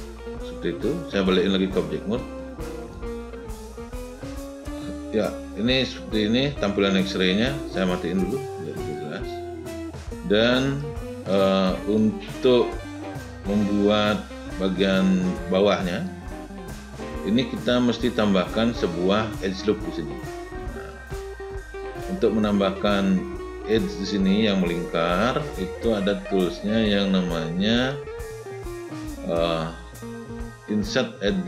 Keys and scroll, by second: 1.8 space.